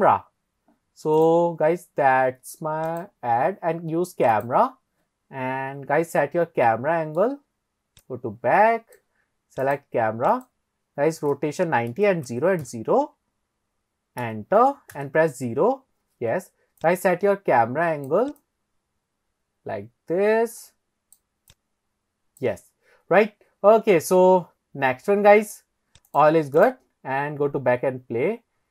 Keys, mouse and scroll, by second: 1.2 click, 2.9 click, 6.3-6.7 scroll down 1, 6.7-7.6 middle drag, 8.0 click, 9.6 click, 10.3-14.3 drag, 15.0 KP_0, 16.8 click, 18.4-19.6 drag, 21.5 click, 24.4-24.8 scroll up 2, 25.2-25.6 scroll up 1, 26.1 drag, 26.6-28.0 drag.